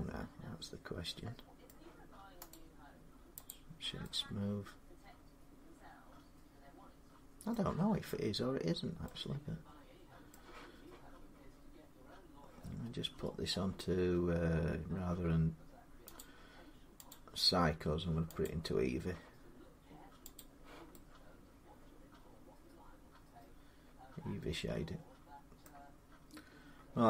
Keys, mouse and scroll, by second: 1.4 middle click, 2.3 right click, 3.3 click, 7.3 middle click, 8.5-8.8 scroll down 3, 8.8 scroll, 10.1-15.2 middle click, 12.3 scroll down 3, 12.5-13.0 scroll up 10, 16.0 click, 16.9 click, 18.2 click, 20.2 click, 23.3-25.2 drag, 25.4 middle click, 26.4-26.9 scroll down 3.